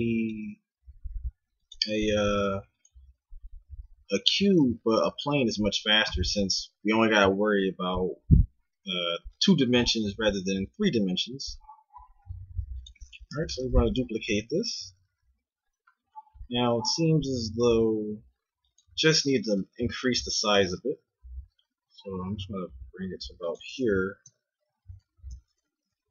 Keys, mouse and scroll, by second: 0.8 s, 1.9 g, 4.5 s, 10.8 g, 13.6 shift+d, 19.4-23.4 right drag, 20.8 g, 24.3 Tab, 24.9-26.1 right drag, 25.3 Tab, 25.9 Tab.